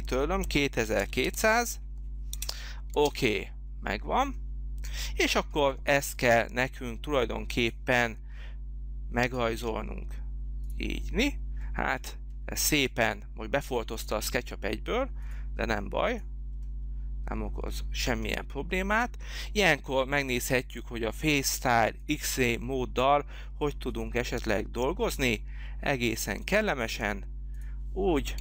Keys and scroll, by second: 0.4 z, 1.2 0, 2.3 Return, 2.9 space.